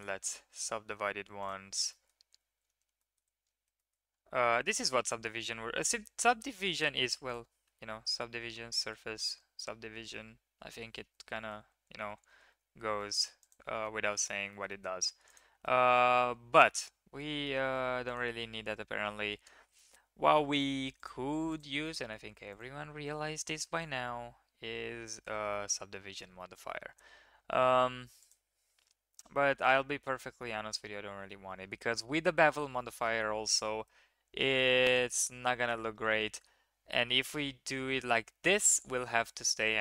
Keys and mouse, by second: 0.0 click, 1.4 click, 1.9 drag, 3.0 shift+click, 3.7 shift+drag, 5.1-5.6 shift+middle drag, 6.7 click, 7.2 click, 7.6 Tab, 8.6 Tab, 9.2-10.2 drag, 10.2 middle drag, 10.3 click, 10.4-10.7 middle drag, 10.7 drag, 11.6 ctrl+z, 11.8 ctrl+z, 12.2 ctrl+z, 12.4 ctrl+z, 12.9 drag, 13.4 click, 13.8 click, 14.5 shift+drag, 14.7 click, 15.6 drag, 16.6 middle drag, 16.8 Tab, 17.4 middle drag, 18.1 click, 18.4-18.7 middle drag, 19.3 Tab, 21.0 click, 21.5 click, 22.5 click, 24.8 ctrl+1, 25.5 click, 26.4-26.7 drag, 28.2 click, 29.7 click, 31.9 drag, 32.7 middle drag, 34.9 middle click, 35.5 middle drag, 37.1-38.7 middle drag.